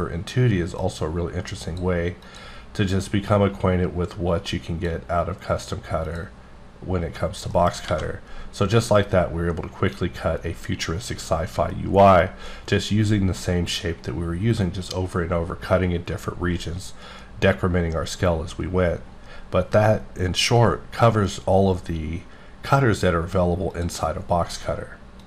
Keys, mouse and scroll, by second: 0.8 click, 2.5 click, 3.3 click, 6.0 click, 6.6-7.4 scroll down 1, 7.4 scroll down 4, 7.5 middle click, 8.0 a, 8.1-9.1 scroll up 1, 9.1-10.0 scroll up 1, 23.7 click.